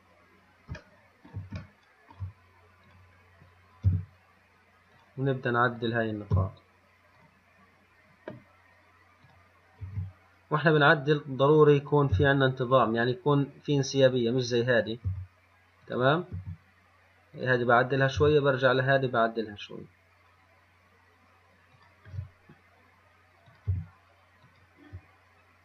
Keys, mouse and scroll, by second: 0.2-0.6 scroll up 3, 1.5-3.1 shift+middle drag, 3.1 click, 4.1 g, 6.0 click, 6.6 g, 9.5 click, 10.1 g, 12.1 click, 12.4 g, 15.1 click, 15.3 g, 16.6 g, 18.2 click, 18.4 g, 23.7 click, 24.0 g.